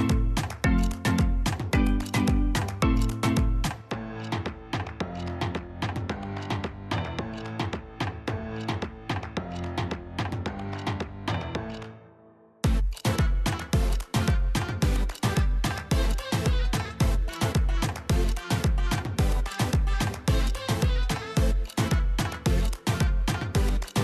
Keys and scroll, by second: 1.5 alt+Tab, 3.5 ctrl+c, 3.7 ctrl+v, 11.5 Delete, 12.7 Delete, 14.1 alt+Tab, 14.1 ctrl+c, 14.1 ctrl+v.